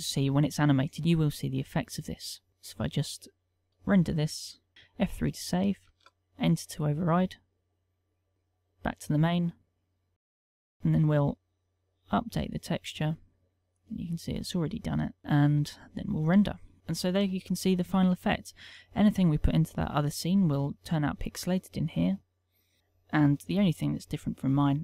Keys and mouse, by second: 4.4 F12, 8.1 click, 10.1 middle click, 10.6 click, 11.3 middle click, 12.6 middle click, 13.3 click, 14.0 middle click, 15.0 click.